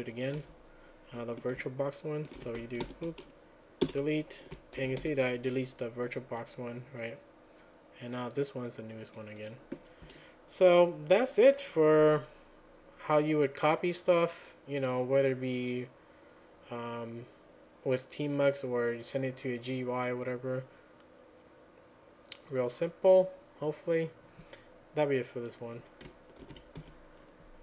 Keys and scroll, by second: 2.4 ctrl+a, 2.4 q, 3.9 Return, 4.8 ctrl+a, 5.1 =, 26.8 ctrl+a, 26.8 1.